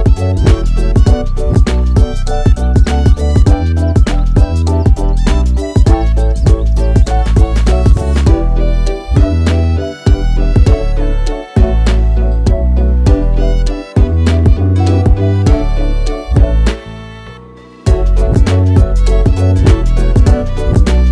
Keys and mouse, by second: 0.7 ctrl+f, 4.1-4.7 middle drag, 5.3 drag, 7.1 ctrl+r, 14.6 ctrl+s, 15.7 KP_1, 17.0 s.